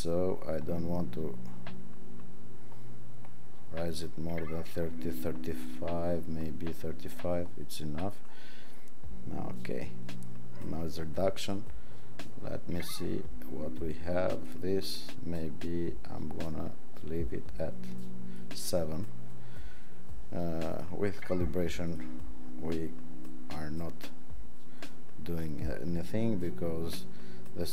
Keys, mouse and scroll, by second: 21.8 click.